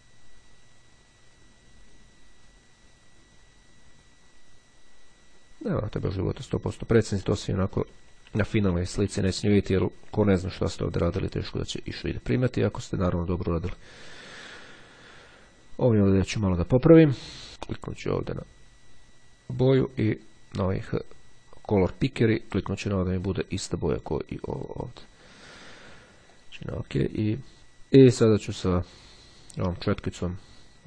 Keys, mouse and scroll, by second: 7.6 [, 10.5 click, 12.6-13.6 drag, 14.2 click, 17.8 click, 20.0 click, 24.2-25.3 drag, 26.2 click, 28.7 click.